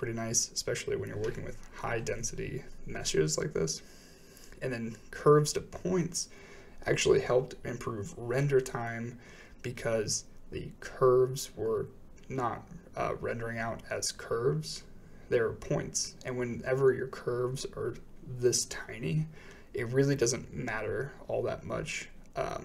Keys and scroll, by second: 1.5 m, 9.3 m, 17.7 m.